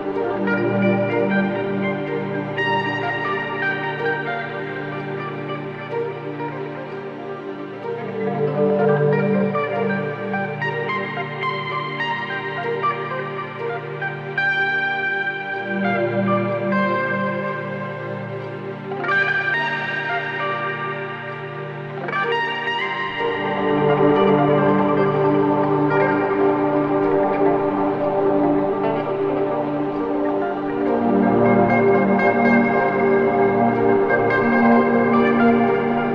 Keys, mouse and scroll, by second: 0.6 click, 1.4 ctrl+space, 1.5 ctrl+click, 1.8 ctrl+space, 3.3 click, 7.6 click, 11.7-15.7 typing, 17.2 click, 20.2-25.2 drag, 25.2-26.3 typing, 27.6 typing, 30.6-36.1 drag.